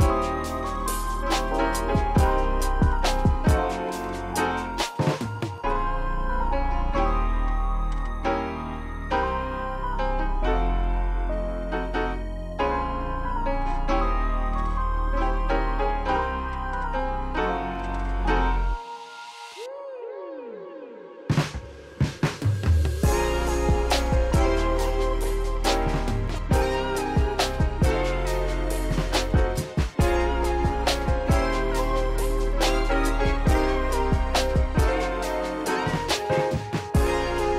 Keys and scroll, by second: 11.6 Return, 13.4 ctrl+alt+shift+c, 17.6 Return, 24.9 ctrl+z, 27.0 ctrl+alt+shift+b, 28.6 ctrl+alt+shift+c.